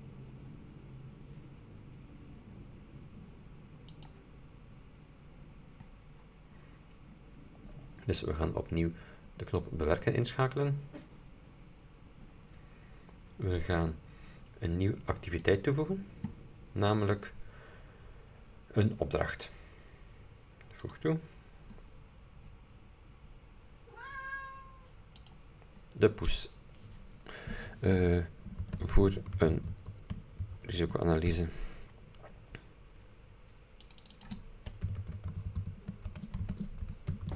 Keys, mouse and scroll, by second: 4.1 click, 6.4-7.4 scroll down 4, 8.5-8.9 scroll up 2, 10.0 click, 12.6-13.7 scroll down 4, 13.7-14.2 scroll up 2, 15.6 click, 19.4 click, 20.9 click, 25.3 click, 28.5-30.2 typing, 30.8 shift+Tab, 33.9 click, 34.7-37.3 typing.